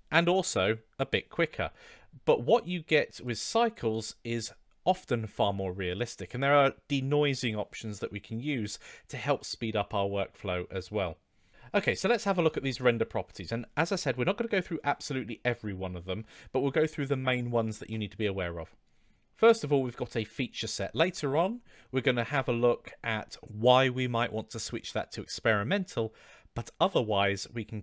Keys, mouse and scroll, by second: 3.1-4.0 drag, 23.4-27.8 drag.